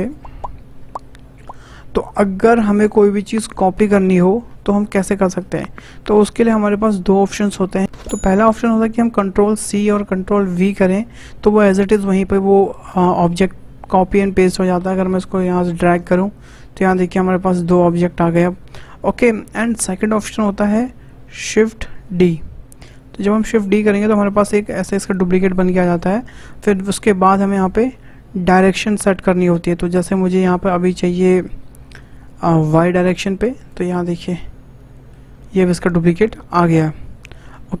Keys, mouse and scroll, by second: 0.0 shift+click, 4.7-5.2 scroll up 2, 9.7 ctrl+c, 10.4 ctrl+v, 14.5 w, 15.2 click, 17.1-19.4 middle drag, 19.4 Delete, 20.2 click, 22.0 shift+d, 34.0-37.4 middle drag, 37.4-37.8 scroll up 2.